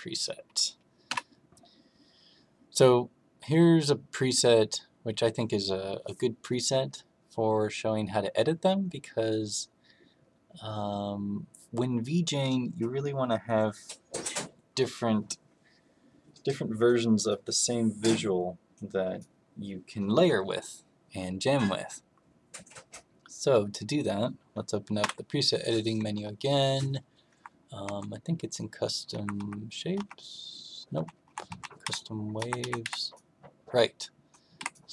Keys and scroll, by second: 25.0 m, 27.2 Up, 27.8 Down, 29.1 Up, 29.3 Right, 29.9 Right, 30.9 Left, 31.2 Left, 31.4 Down, 31.8 Right, 32.3 Up, 32.5 Up, 32.8 Right, 34.5 Right.